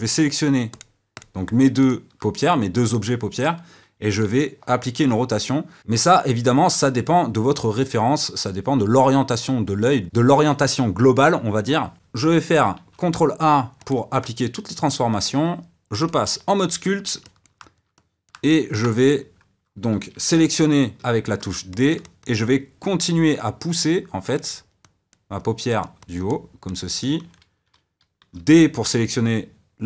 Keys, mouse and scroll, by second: 0.7 click, 1.1 click, 1.8 shift+click, 4.2 r, 13.9 ctrl+a, 16.1-17.2 drag, 17.2-20.9 shift+middle drag, 20.9 d, 21.7 shift+middle click, 22.2 f, 23.0-28.4 drag, 28.4 d.